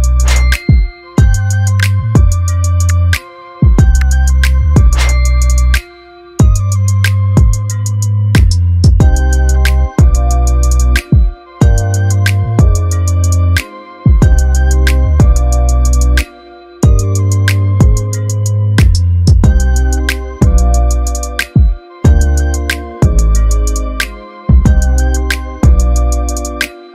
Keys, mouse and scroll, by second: 5.3 middle click, 6.4-6.9 scroll down 1, 7.7-8.9 click, 9.0-9.4 scroll up 1, 10.7-12.2 drag, 12.5 middle click, 14.6-18.3 drag, 24.8-26.6 drag.